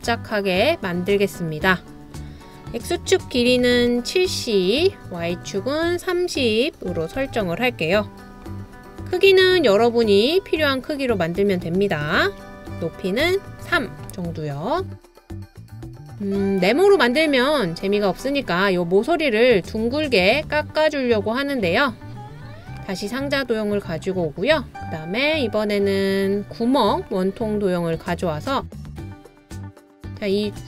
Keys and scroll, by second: 3.3-4.4 typing, 6.7-7.8 typing, 12.3-13.3 typing, 16.9 typing, 24.2 typing, 27.6 typing.